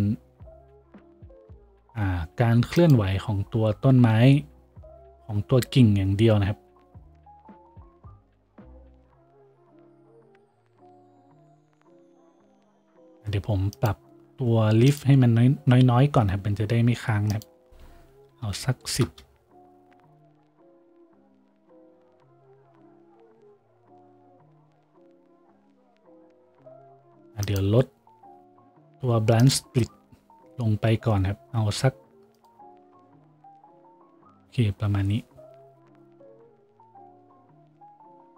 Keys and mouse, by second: 36.9 z.